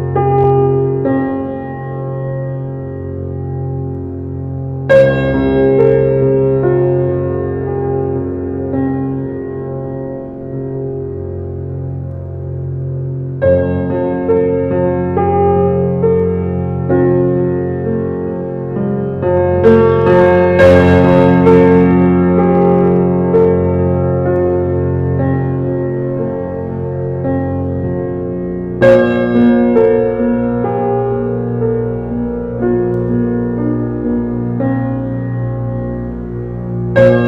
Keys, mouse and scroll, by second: 3.8 click, 5.1 click, 5.5 click, 6.3 e, 8.1 Tab, 8.6 scroll down 4, 8.9-9.3 middle drag, 9.3 click, 9.5 scroll down 5, 9.8-10.6 middle drag, 10.6 scroll down 2, 10.8-11.9 middle drag, 11.9 shift+a, 13.0 shift+a, 13.5 alt+middle click, 13.9 alt+middle click, 15.3 shift+middle click, 15.9 s, 16.9 scroll up 1, 17.3 shift+middle click, 17.8 g, 18.6 scroll up 1, 18.9-19.2 shift+middle drag, 19.2 s, 20.1 s, 21.7 shift+a, 23.4 shift+a, 23.7-24.6 shift+middle drag, 24.6-25.8 drag, 25.8 shift+middle click, 26.6 g, 27.9-28.3 shift+middle drag, 28.3-28.7 scroll up 2, 28.7 scroll down 2, 29.0-29.4 shift+middle drag, 29.4 s, 30.1 shift+middle click, 30.5 scroll up 1, 30.7 s, 32.7 alt+middle click, 33.4 alt+middle click, 34.7-35.7 scroll up 5, 35.0 shift+middle drag, 35.7 scroll down 1, 36.1-36.6 shift+middle drag, 36.6 shift+a.